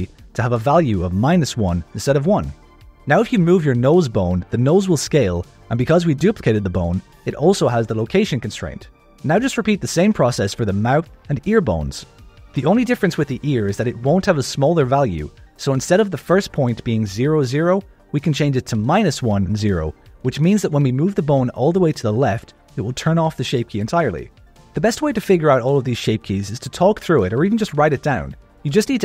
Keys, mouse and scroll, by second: 1.3 click, 1.7 click, 2.2 alt+a, 2.4 click, 2.8 g, 8.5 click, 9.3 click, 10.0 shift+d, 10.4 ctrl+shift+middle click, 11.2 shift+d, 11.7 shift+middle click, 12.3 click, 12.6 F2, 13.5 click, 13.9 F2, 14.9 click, 15.1 click, 15.4 right click, 15.4 click, 15.8 click, 16.3 right click, 17.1 click, 17.2 click, 17.6 click, 18.2 click, 19.6 click, 20.1 click, 20.9 click, 21.0 g, 23.3 click, 23.4 g, 24.5 click, 24.7 g, 26.2 click, 26.5 g.